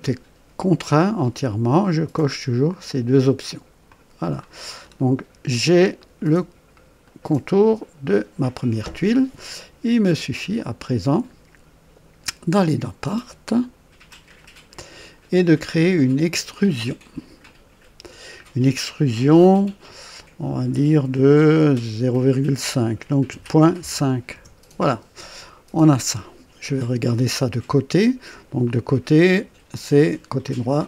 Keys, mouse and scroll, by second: 3.8 click, 4.8-5.6 scroll up 4, 6.0-6.8 right drag, 7.0-7.6 right drag, 7.8 scroll up 1, 10.5 click, 14.4 click, 17.4 click, 23.3 KP_Decimal, 23.8 KP_5, 24.3 KP_Enter, 30.4 click.